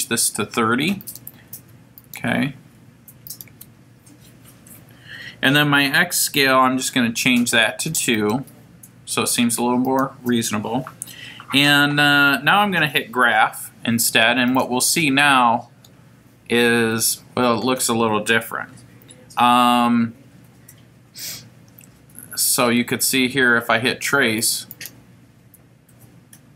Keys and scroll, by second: 1.0 3, 2.0 0, 3.3 Down, 8.2 2, 9.9 Down, 14.5 F5.